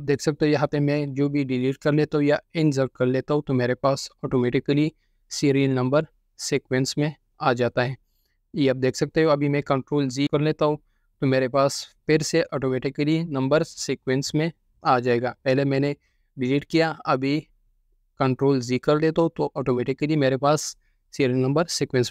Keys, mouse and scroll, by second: 1.1 right click, 6.2 F4, 7.0 F4, 8.4 F4, 10.4 F4, 11.1 F4, 11.9 F4, 16.9 ctrl+z, 17.3 ctrl+z, 17.5 ctrl+z, 17.7 ctrl+z, 17.9 ctrl+z, 19.2 ctrl+z, 19.9 ctrl+z.